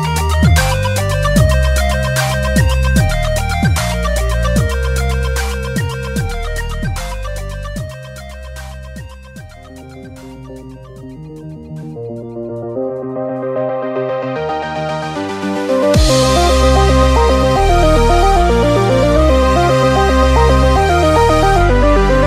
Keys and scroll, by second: 7.5 b, 14.2 super+t, 20.9 super+[.